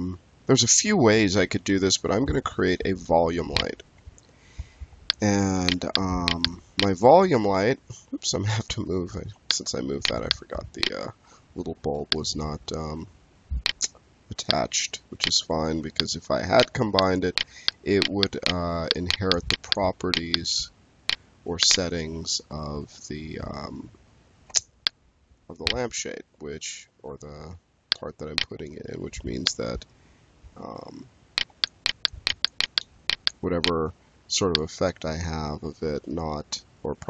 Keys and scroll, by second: 7.4 w, 24.4 space.